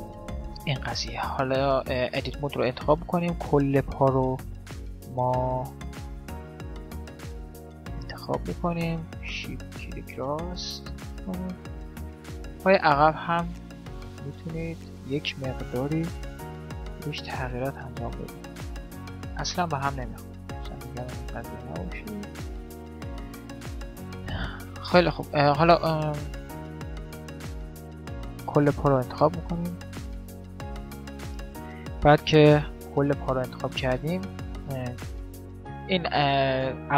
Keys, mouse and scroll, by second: 0.7 Tab, 3.1-4.8 right drag, 4.8-6.0 middle drag, 6.0 click, 8.3-10.0 right drag, 10.9 ctrl+r, 10.9-15.9 middle drag, 14.4 right click, 15.9 ctrl+r, 15.9 click, 16.9 right click, 17.2 ctrl+r, 18.1 ctrl+r, 18.7 right click, 19.1-20.9 right drag, 19.6 ctrl+r, 21.3-23.1 middle drag, 23.3-27.9 middle drag, 27.9-29.6 drag, 29.8 middle click, 30.5 right click, 30.8-32.1 drag, 32.3-33.6 middle drag, 32.4 g, 33.8 middle click, 35.0-36.9 drag.